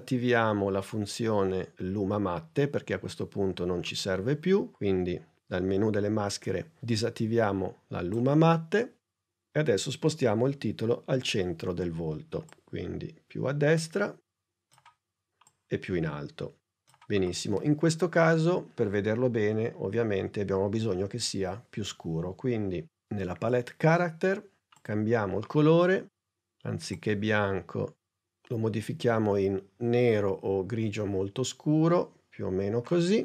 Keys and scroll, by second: 10.3 p.